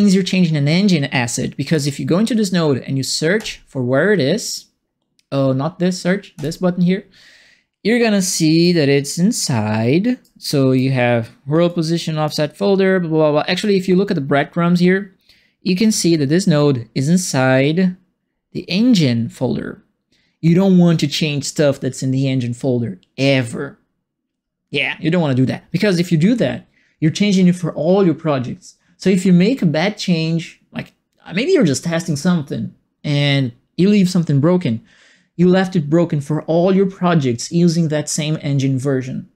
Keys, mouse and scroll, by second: 1.6 click, 1.7 click, 3.3 click, 6.3 click, 8.2 right click, 9.1-10.2 right drag, 10.4 right click, 11.6 right click.